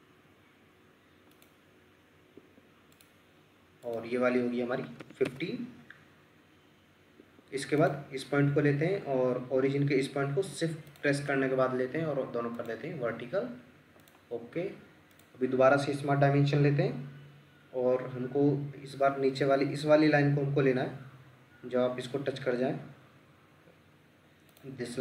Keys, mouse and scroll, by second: 2.4 Escape, 4.8 typing, 5.3 Return, 7.2 Escape, 10.9 shift+click.